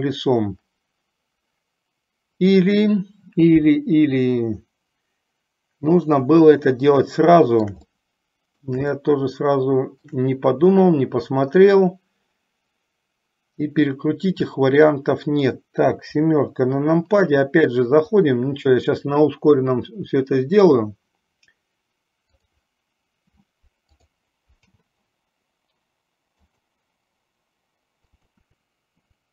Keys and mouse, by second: 0.0 click, 7.2-8.1 shift+middle drag, 8.2 middle click, 9.2-10.4 shift+middle drag, 11.1-15.8 middle drag, 16.4 KP_7, 18.3-22.8 drag, 24.7 k, 28.6 middle click, 29.2 middle click.